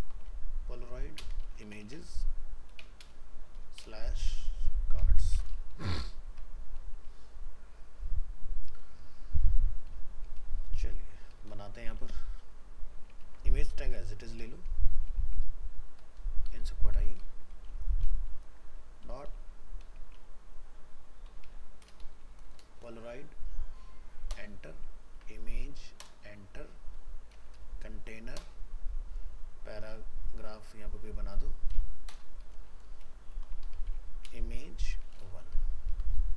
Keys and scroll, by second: 13.2 ctrl+z, 15.2 ctrl+x, 25.1 ctrl+v.